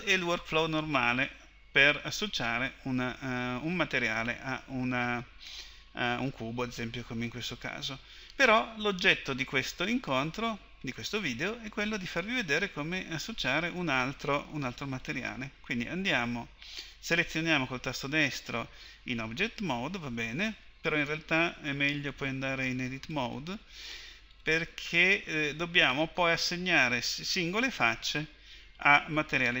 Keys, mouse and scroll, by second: 15.0-18.0 right drag, 22.1 click.